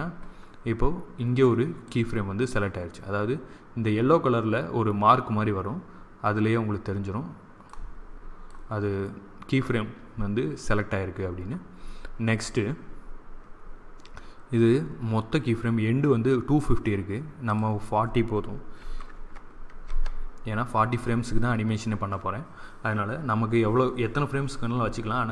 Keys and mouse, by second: 1.3-3.1 drag, 7.6-9.3 drag, 17.4-19.4 drag.